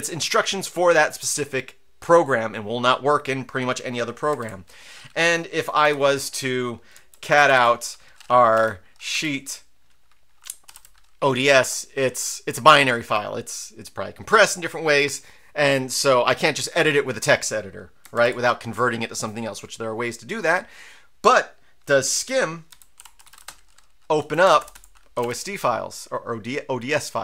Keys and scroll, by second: 4.4 ctrl+l, 5.8 v, 6.9-7.8 typing, 8.5 Tab, 9.1 Tab, 10.6 typing, 10.7 Tab, 11.6 Return, 18.1 ctrl+l, 22.0-25.1 typing, 24.2 Right, 25.2 Tab.